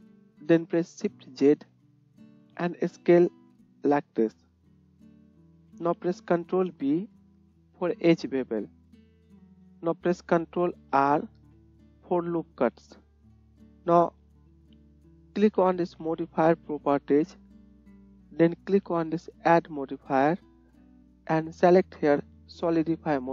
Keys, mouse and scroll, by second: 0.1-13.2 middle drag, 7.1 ctrl+b, 9.4 KP_1, 11.3 ctrl+r, 13.5 click, 14.7-19.9 middle drag, 19.9-23.3 drag.